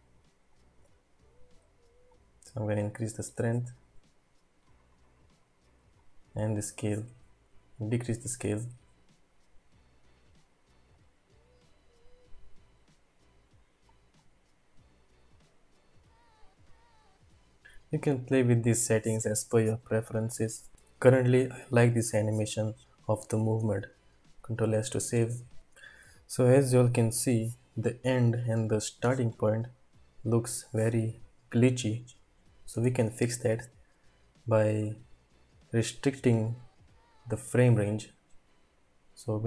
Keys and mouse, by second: 25.6 click, 27.2-28.4 drag, 29.0 space, 30.8 click.